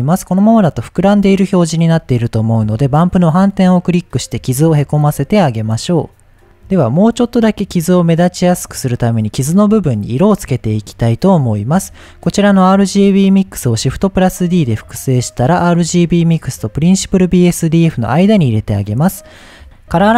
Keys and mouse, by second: 1.3-1.9 shift+middle drag, 3.0 click, 10.6 middle click, 11.6 click, 13.8 shift+d, 14.4 click.